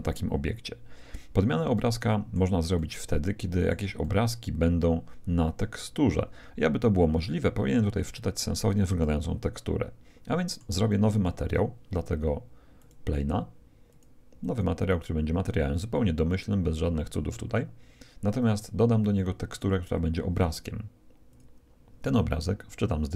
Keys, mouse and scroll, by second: 1.7-5.9 middle drag, 8.9-10.7 middle drag, 10.9-12.5 middle drag, 12.7-16.1 drag, 18.3-22.0 drag, 22.4 middle click, 22.4-23.1 scroll up 1, 23.1 click.